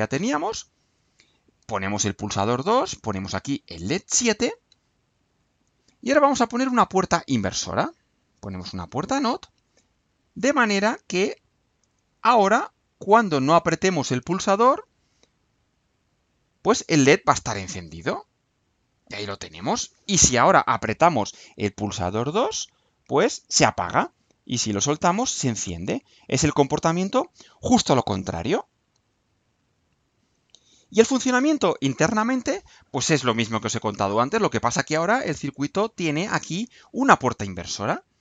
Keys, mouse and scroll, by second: 1.3 click, 2.2 click, 3.2 click, 4.6 scroll down 2, 5.4 click, 7.1 click, 8.7 click, 9.7 click, 11.4 click, 13.4 click, 15.9 click, 33.7 click, 34.2 scroll down 2, 34.8-35.8 scroll down 3, 36.1 scroll down 2, 36.4-36.7 scroll up 2.